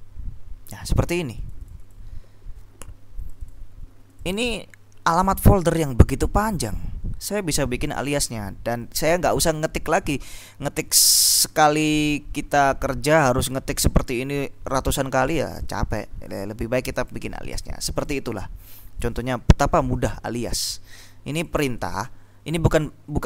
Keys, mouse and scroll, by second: 1.6 click, 3.4 click, 4.3 click, 5.5-9.1 drag, 10.1-15.7 drag, 16.9 click, 18.0 click, 19.3-22.5 drag.